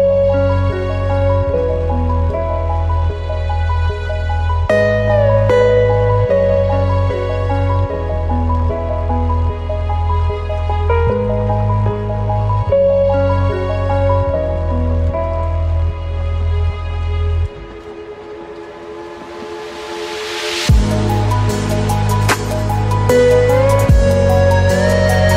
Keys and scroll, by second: 15.6 ctrl+z.